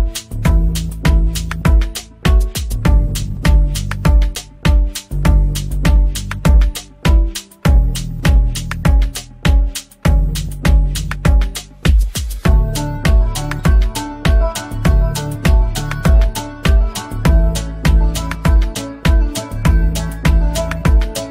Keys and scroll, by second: 2.8 space, 3.0 F3, 7.6 Escape, 11.1 Escape, 13.3 F3, 14.2 Escape, 14.5 F2, 19.0 F3, 20.7 Escape, 21.1 F2.